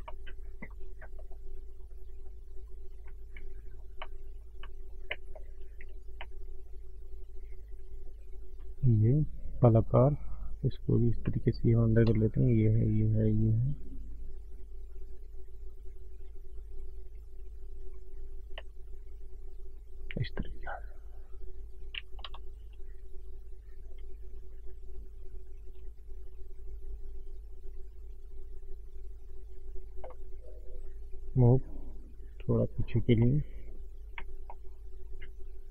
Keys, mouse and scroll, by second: 0.2 middle click, 0.7 middle click, 0.7 scroll up 1, 1.1 middle click, 1.7 click, 2.8 click, 3.1 scroll down 4, 3.3 middle click, 3.7-4.1 scroll up 2, 4.0 middle click, 4.6 middle click, 5.3-5.9 scroll up 1, 6.8 middle click, 6.8-7.1 scroll down 1, 7.2 click, 7.5 shift+click, 9.3 click, 10.8 click, 11.6 click, 12.2 shift+click, 12.4 shift+click, 13.0 click, 13.2 shift+click, 14.4 click, 16.2 shift+click, 16.9 click, 17.1 click, 18.3 click, 18.9 shift+click, 19.1 shift+click, 20.4 click, 22.1 ctrl+z, 22.4 shift+click, 23.3 click, 24.7 click, 26.1 shift+click, 26.4 shift+click, 28.0 click, 28.6 click, 30.0 middle click, 31.3 click, 32.8 click, 33.1 middle click, 33.1 scroll down 1, 33.8-34.1 scroll down 5, 34.1 middle click, 34.6 scroll up 1, 34.7 middle click.